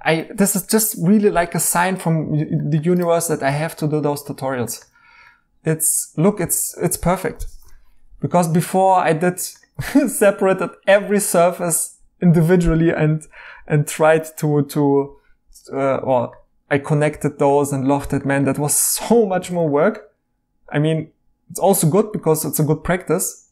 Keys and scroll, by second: 3.5 e, 6.4 e, 19.5 e.